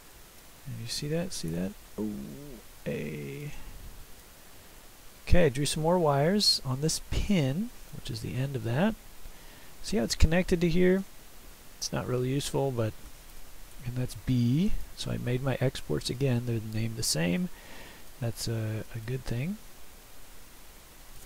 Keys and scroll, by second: 1.6 ctrl+e, 13.4 ctrl+e, 16.1 s, 18.9 Escape, 20.2 ctrl+s.